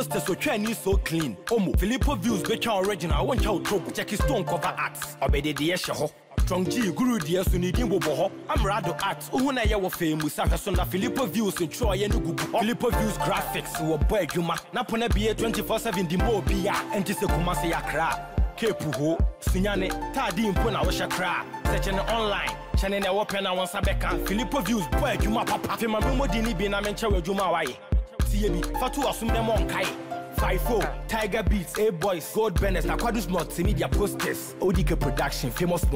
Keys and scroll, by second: 10.5 ctrl+s, 32.1 Down, 33.3 Right, 34.8 Down.